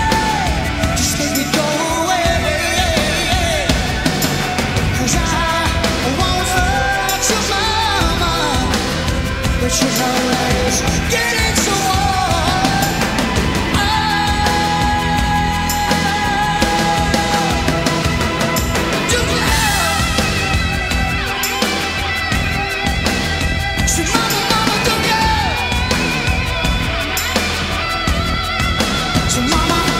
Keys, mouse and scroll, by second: 2.2-4.3 drag, 4.3 g, 11.4 g, 16.5 Tab, 21.2 g, 22.2-29.9 right drag, 26.0 Tab, 28.8 g.